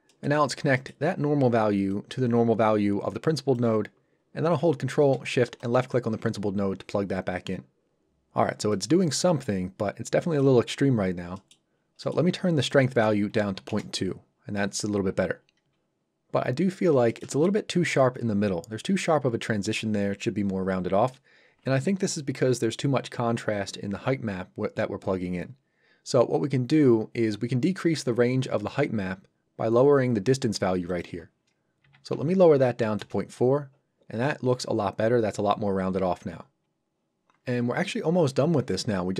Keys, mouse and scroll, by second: 0.1 middle click, 0.5 scroll up 1, 0.8 middle click, 1.9 click, 5.6 ctrl+shift+click, 8.7 middle click, 10.7-11.0 scroll up 1, 11.4 middle click, 11.8 scroll down 1, 12.1 middle click, 12.6 click, 13.5 KP_2, 13.7 Return, 16.4 scroll up 1, 17.1 shift+middle click, 17.3 middle click, 17.4 middle click, 30.9 click, 32.1 KP_4, 33.0 Return.